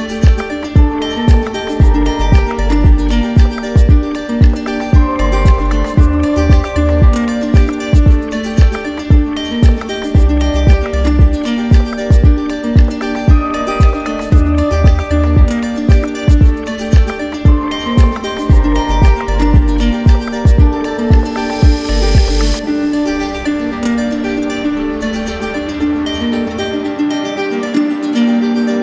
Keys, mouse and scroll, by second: 2.1 click, 3.9 click, 5.7 click, 6.6 ctrl+z, 8.7 click, 12.4 click, 14.1 right click, 16.2 right click, 17.4 click, 17.5 ctrl+click, 18.9 ctrl+z, 19.8 click, 20.4 click, 21.2 click, 22.2 ctrl+click, 22.3 ctrl+click, 23.4 ctrl+z, 24.8 ctrl+click, 28.6 right click.